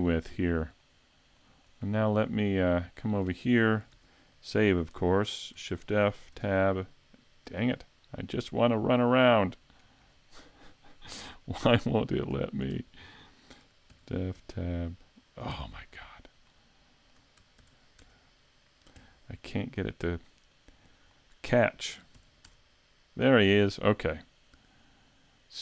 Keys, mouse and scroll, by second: 0.3 middle click, 1.4 shift+middle click, 1.8-2.4 scroll up 3, 2.2 shift+middle click, 3.0 scroll up 1, 3.4 shift+middle click, 4.0 s, 5.7 shift+f, 8.0 scroll down 3, 8.4 scroll up 3, 11.7 shift+middle click, 12.8 shift+middle click, 13.9 shift+f, 16.0 scroll up 1, 16.5 shift+middle click, 17.6 shift+f, 19.4 scroll down 2, 19.9 middle click, 20.0 shift+middle click, 20.8 scroll up 2, 21.1 shift+middle click, 22.2 shift+f.